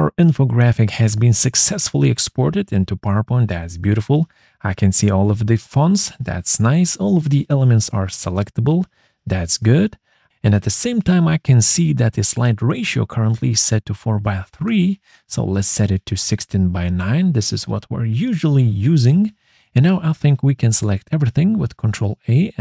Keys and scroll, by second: 20.6 ctrl+a, 22.3 ctrl+g.